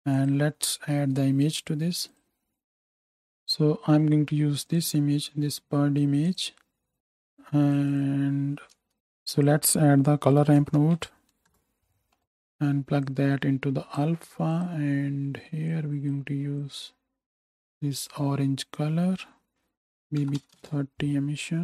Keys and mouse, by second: 0.1-2.7 drag, 9.0 click, 9.0 x, 12.0-13.0 drag, 14.9-19.5 drag.